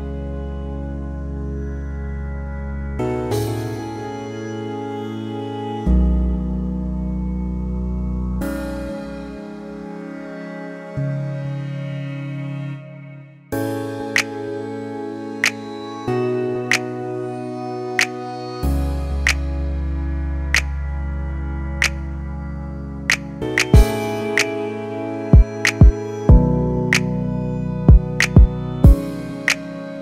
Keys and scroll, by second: 0.6 1, 0.7 5, 1.0 Return, 2.1 typing.